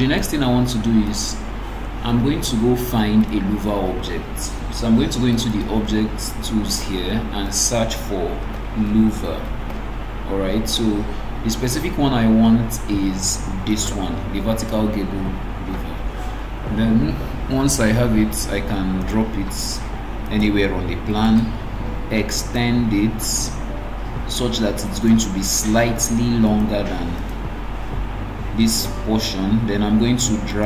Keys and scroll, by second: 29.4 ctrl+d.